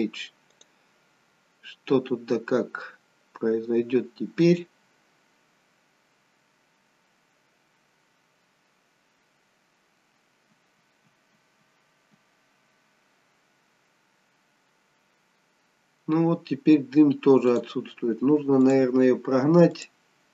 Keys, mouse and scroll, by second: 13.5-13.9 scroll down 1, 14.9 scroll down 1, 15.1 scroll up 1.